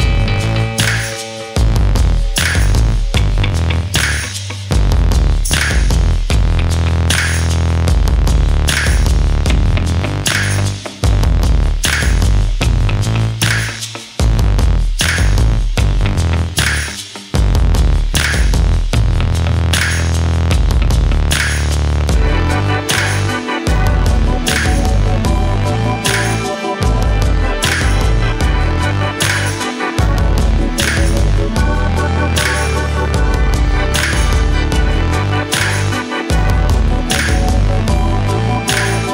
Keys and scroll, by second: 15.4 ctrl+a, 26.9 ctrl+g.